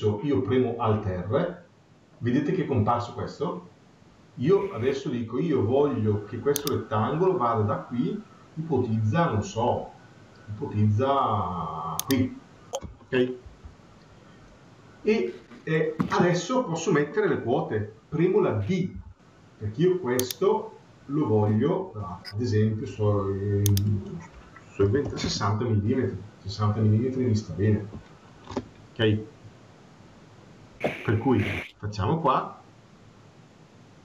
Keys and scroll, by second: 13.3 Escape, 25.0 Return.